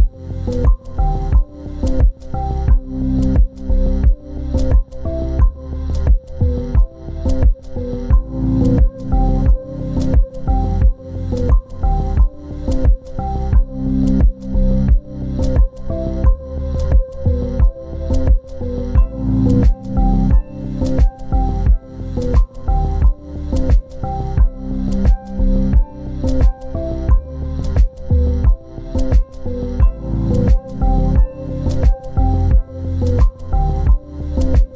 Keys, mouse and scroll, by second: 0.4 ctrl+space, 1.2 double click, 5.1 scroll up 1, 7.5 scroll up 1, 7.7 ctrl+z, 10.1 scroll down 1, 15.2 z, 18.3 ctrl+space, 18.5 ctrl+click, 25.6 right click.